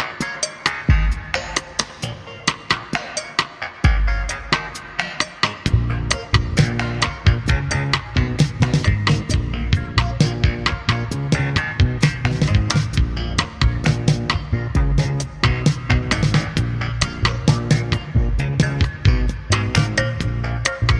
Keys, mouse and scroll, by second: 6.5 click, 12.8-16.1 drag, 16.6 click, 18.3-18.8 drag, 20.6 click.